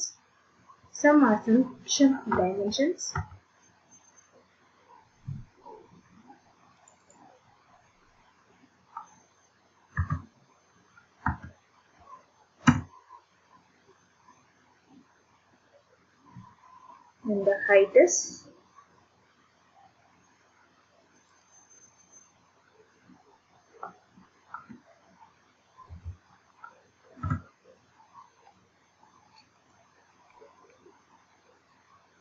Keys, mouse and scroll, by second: 3.1 Escape, 6.9 click, 7.1 click, 9.9 8, 11.2 2, 12.6 Return, 14.8 middle click, 15.0 middle click, 15.1-16.5 scroll, 21.3 click, 21.6 click, 24.5 1, 25.9 5, 27.2 Return, 29.7 click.